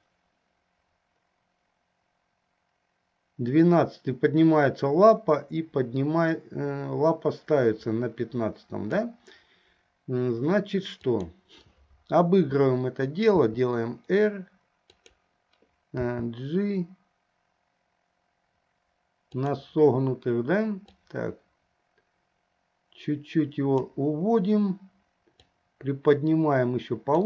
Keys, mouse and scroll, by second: 11.1 click, 13.4 r, 16.3 g, 21.2-24.2 drag, 26.0-27.2 drag.